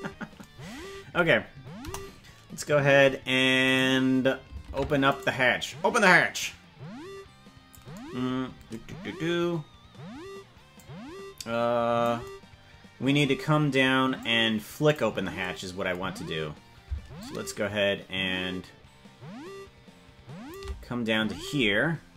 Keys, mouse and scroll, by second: 1.8 KP_0, 2.5 scroll up 2, 3.8 right click, 4.8 ctrl+Tab, 5.2 right click, 6.3-7.7 drag, 9.1 scroll up 5, 10.7-12.1 drag, 14.2 click, 17.2-20.5 shift+drag.